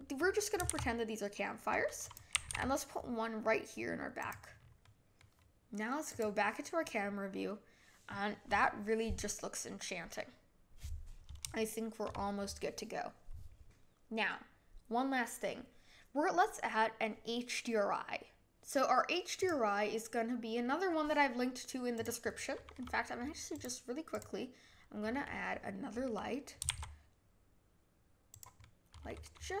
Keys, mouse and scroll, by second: 0.6 shift+d, 2.4 g, 4.8-6.0 middle drag, 6.0 click, 11.5-14.8 shift+middle drag, 19.3 click, 22.0 click, 22.3-23.5 middle drag, 23.5 click, 24.1 click, 25.1-26.6 middle drag, 26.6 shift+d, 28.6-29.6 middle drag.